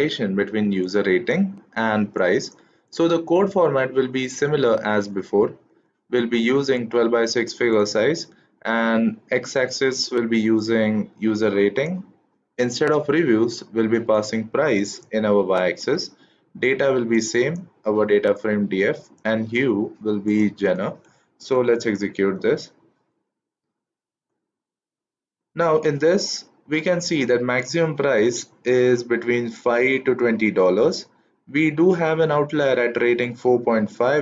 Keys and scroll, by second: 21.7 shift+Return.